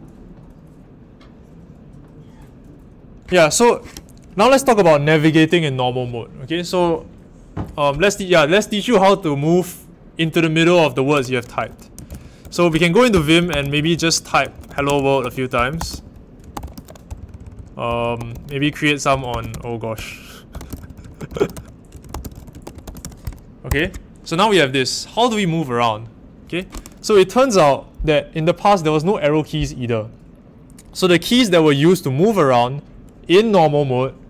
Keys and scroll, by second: 11.7-23.5 typing, 23.6 Escape.